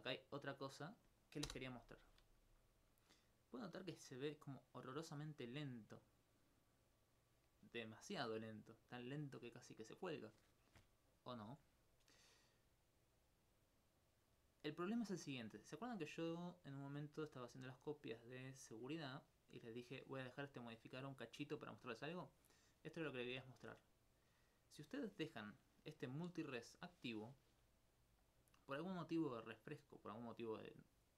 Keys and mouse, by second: 1.5 Return, 3.9 middle click, 5.0 Tab, 10.9 Escape, 12.9-15.8 middle drag, 17.7 click, 22.1 middle click, 24.1 right click.